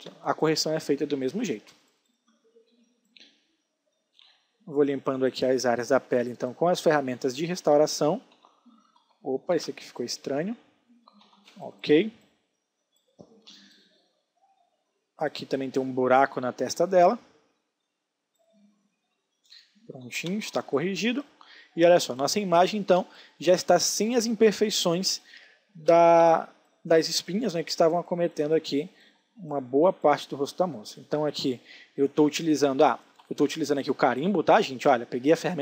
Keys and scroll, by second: 0.1 alt+space, 4.3 space, 8.3 ctrl+d, 8.9 ctrl+z, 9.5 ctrl+alt+z, 11.2 ctrl+d, 11.4 space, 19.5 ctrl+d, 20.3 space, 26.2 s, 32.3 ctrl+alt+z.